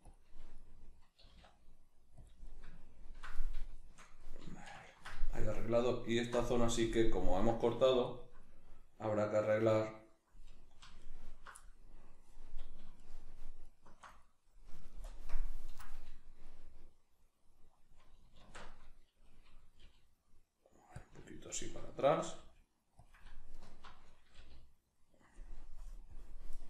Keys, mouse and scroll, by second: 0.1 click, 0.6 middle click, 1.3 g, 2.3 click, 2.5 middle click, 3.4-6.1 middle drag, 6.1 alt+right click, 6.8 KP_Decimal, 7.0-11.0 middle drag, 11.0 alt+right click, 11.6-13.0 middle drag, 13.0 alt+shift+right click, 13.6 alt+shift+right click, 14.2-21.1 middle drag, 15.0 ctrl+KP_Add, 15.3 ctrl+KP_Subtract, 18.4 alt+q, 19.9 g, 21.1 click, 21.2-23.1 ctrl+middle drag, 22.4 g, 23.1 click, 23.5 alt+right click, 24.4 g.